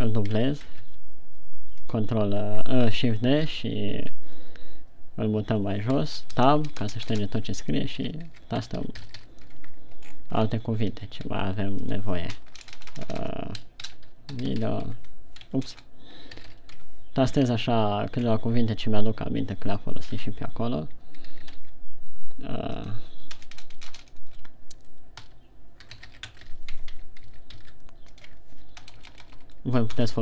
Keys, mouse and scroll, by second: 1.0 shift+d, 2.4 click, 4.0 shift+scroll down 5, 6.4 Tab, 6.7-9.5 typing, 9.9 Tab, 10.5-11.2 shift+scroll down 10, 11.7-17.0 typing, 12.3 Tab, 12.3 click, 15.4 Tab, 15.9 Tab, 17.3 Tab, 17.8-18.3 scroll down 4, 18.5 shift+scroll down 2, 20.5 scroll up 2, 21.7 shift+d, 23.3 Tab, 23.3 click, 23.9-24.5 BackSpace, 25.6-27.7 typing, 27.3 Tab, 28.6 click, 28.7 Tab, 29.2-30.2 typing.